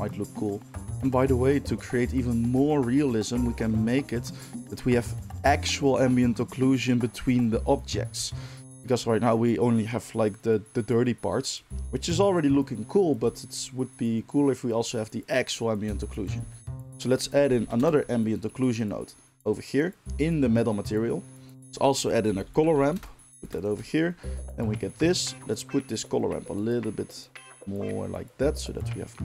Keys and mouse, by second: 16.3 shift+a, 21.6 shift+a, 23.3 ctrl+shift+click, 23.5-25.5 ctrl+shift+middle drag, 25.5-29.2 drag.